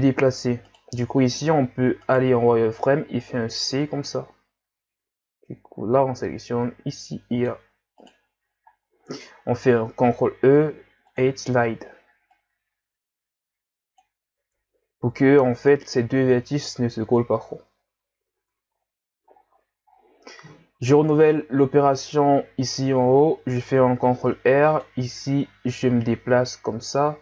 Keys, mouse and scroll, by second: 0.7 right click, 1.0 c, 3.3 c, 8.4 z, 8.7-9.1 scroll down 2, 9.1-9.4 scroll up 1, 10.0 ctrl+e, 14.3 Tab, 15.6 Tab, 18.4 Tab, 18.8-19.3 scroll down 4, 19.3-19.9 scroll up 5, 20.1-20.8 scroll up 6, 20.8-21.8 scroll up 7, 21.8 Tab, 22.2-22.6 scroll up 4, 23.6 ctrl+r.